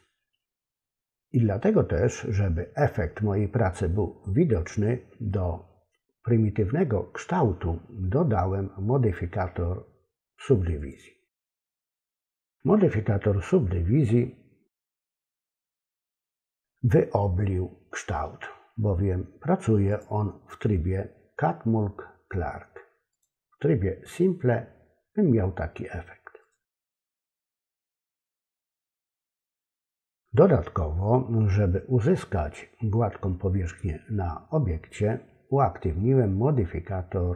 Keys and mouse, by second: 10.8 click, 19.9 click, 23.1 click, 26.4 click, 29.1 click.